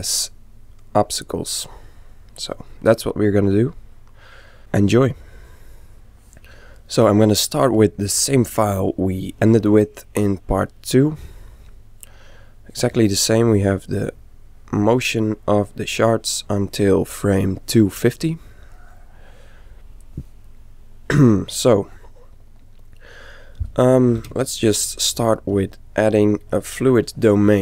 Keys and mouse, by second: 7.3-12.8 middle drag, 13.6-15.5 drag, 20.7-24.7 middle drag, 24.2 shift+c, 25.0-27.3 middle drag.